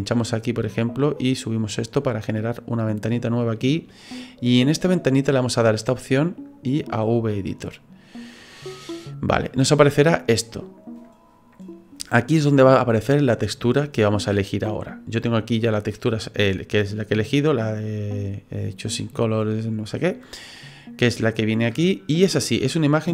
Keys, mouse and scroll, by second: 0.4 click, 5.5 click, 22.6 click.